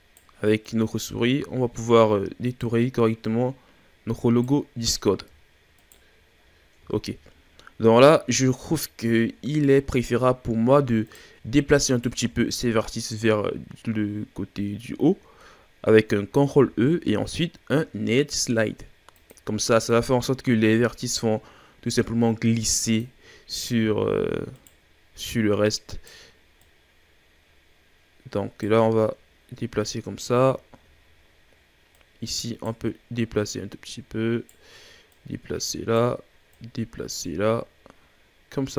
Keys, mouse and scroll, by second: 0.6 right click, 3.2 right click, 5.1-5.8 shift+scroll up 3, 5.8 right click, 6.4-6.9 scroll down 1, 6.9-8.2 shift+scroll up 5, 8.3-9.7 ctrl+scroll down 2, 9.7-11.0 shift+scroll up 1, 11.0 right click, 11.9 alt+right click, 16.4 ctrl+e, 23.7-24.2 scroll up 1, 24.5 right click, 25.2 right click, 26.6 right click, 29.9-31.9 scroll down 5, 31.9 right click, 32.8-33.5 scroll up 1, 33.5 right click, 35.1 right click, 36.5 right click.